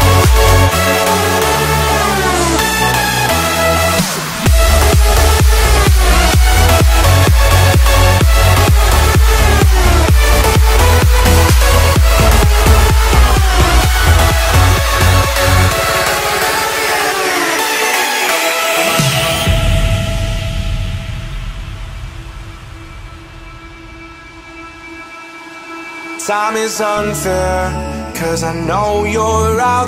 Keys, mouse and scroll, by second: 1.1 8, 1.5 shift+', 1.7 Return, 2.0 space, 2.9 scroll up 1, 3.3 shift+middle click, 4.2 t, 4.6 click, 5.9-8.1 typing, 6.5 Return, 7.3 scroll up 1, 7.8 click, 8.3-9.1 scroll down 1, 9.3 scroll up 1, 9.5 shift+middle click, 10.0 scroll down 1, 10.3 shift+middle click, 11.3 click, 11.9-13.2 scroll up 1, 13.2 r, 13.7 click, 14.3-15.4 scroll up 1, 15.4 click, 16.0 space, 16.3-16.7 scroll up 1, 16.8 ctrl+z, 17.4-18.3 scroll down 1, 18.4 r, 18.9 click, 19.5-20.7 scroll up 1, 20.7 click, 20.8 space, 20.9-21.5 scroll down 1, 22.3 r, 23.4 click, 23.6-24.2 scroll down 1, 24.3 shift+middle click, 25.6 click, 25.6 space, 25.8-26.1 scroll down 1, 26.3 shift+middle click, 26.8 click, 27.4 scroll up 1, 27.8 f, 28.1 click, 28.9-29.8 typing, 29.7 Return.